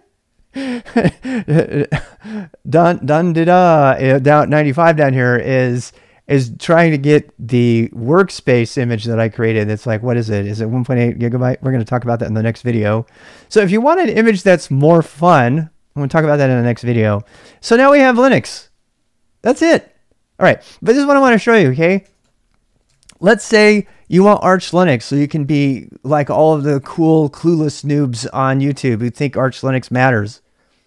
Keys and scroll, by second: 20.6-25.8 typing.